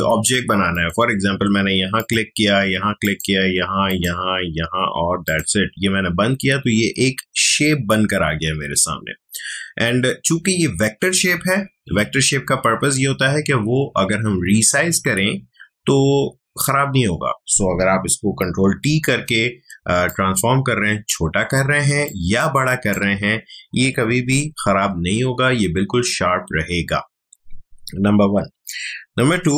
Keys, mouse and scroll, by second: 0.7 click, 18.8 ctrl+t, 20.1-25.3 shift+drag.